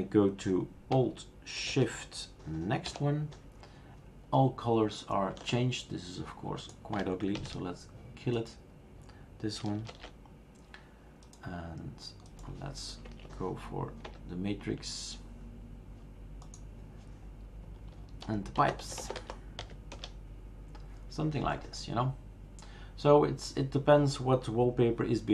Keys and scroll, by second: 2.9 alt+shift+n, 7.4 alt+shift+q, 10.1 shift+super+q, 14.0 Return, 18.4-20.1 typing.